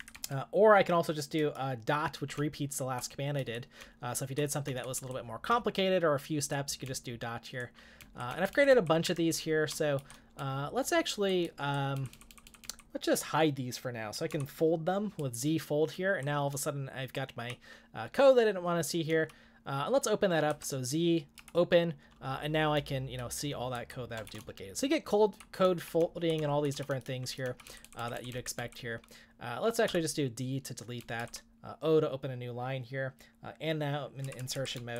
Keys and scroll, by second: 0.0-11.4 typing, 13.9-17.7 typing, 20.2-25.6 typing, 27.4-28.6 typing, 29.9-31.5 typing, 34.4-34.9 typing.